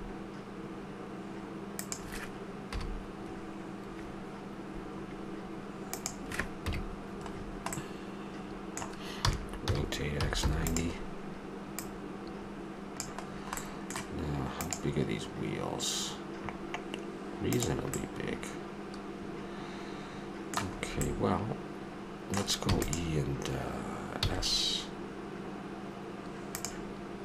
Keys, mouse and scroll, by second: 2.7 KP_Decimal, 6.0 click, 6.6 KP_Decimal, 7.3 middle click, 9.2 r, 11.8-13.6 drag, 13.6-14.7 middle drag, 17.9-19.9 middle drag, 20.7-23.0 middle drag, 22.6 e, 24.1 s.